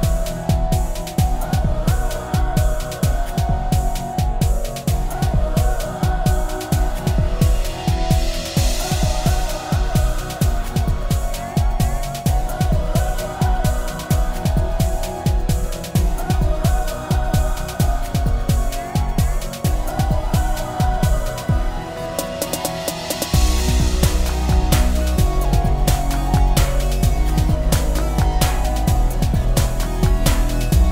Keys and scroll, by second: 23.1 ctrl+space, 23.6 ctrl+space, 23.7 ctrl+space.